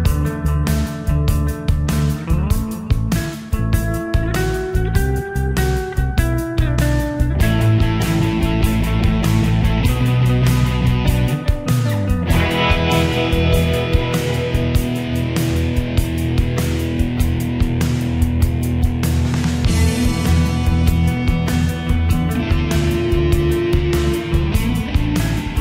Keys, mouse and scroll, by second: 17.0-22.1 drag, 22.1-25.6 ctrl+drag.